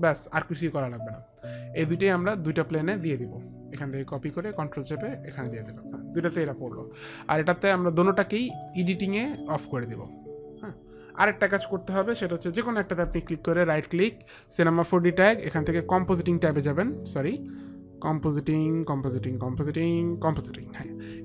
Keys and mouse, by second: 0.9 click, 1.9 click, 4.6 click, 5.1 click, 8.6 click, 10.0 click, 15.8 click, 16.8 right click.